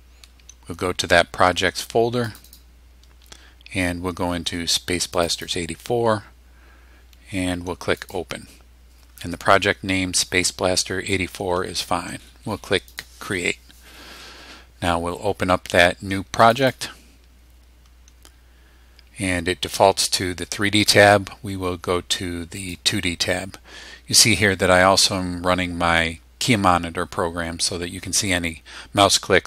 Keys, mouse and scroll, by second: 2.2 click, 5.1 click, 8.0 click, 12.9 click, 16.4 click, 22.6 click, 26.1-27.3 drag, 27.8 click, 28.4 click, 28.9 click.